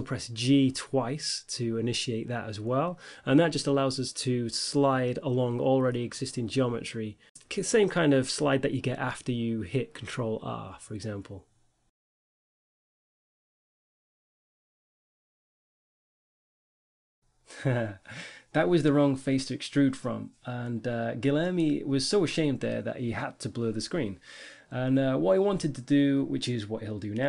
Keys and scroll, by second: 1.0 Tab, 3.8 e, 4.4 x, 5.8 g, 7.0 ctrl+r, 11.5 Tab, 13.3 Tab, 15.6 5, 16.0 1, 16.8 e, 17.2 g.